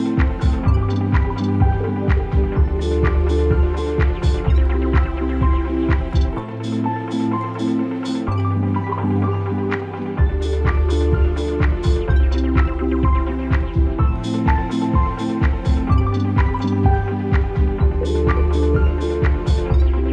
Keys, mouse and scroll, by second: 2.9 click, 11.1 click, 16.7 a, 17.4 Return, 18.0-20.1 typing.